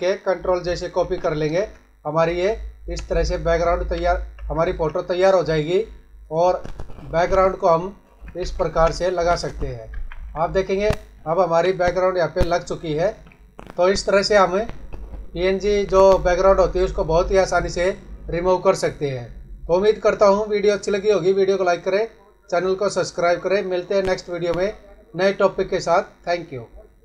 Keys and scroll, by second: 0.9 ctrl+j, 3.7 ctrl+alt+z, 8.3 ctrl+[, 9.9 ctrl+-.